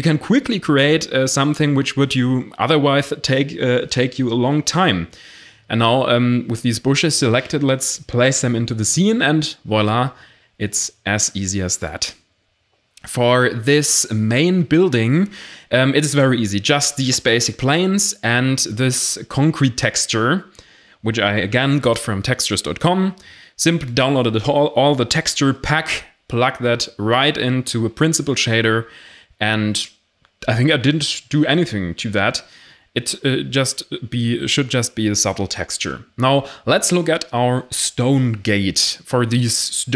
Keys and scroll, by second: 0.3 Tab, 0.5 a, 0.8 shift+d, 1.0 r, 1.1 z, 2.2 Tab, 2.3 a, 3.9 shift+d, 5.2 Tab, 7.9 0, 37.3 shift+a.